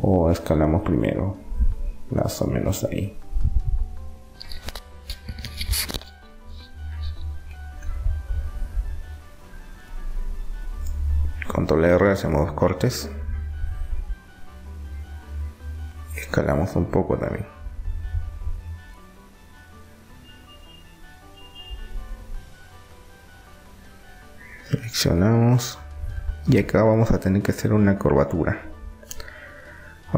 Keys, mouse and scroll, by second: 0.9-2.4 drag, 2.6 click, 10.1 ctrl+r, 13.4 a, 14.1 a, 15.1 s, 20.1 right click, 20.9-22.4 drag, 22.4 middle click, 23.1-25.4 right drag, 25.4 click, 26.9 r.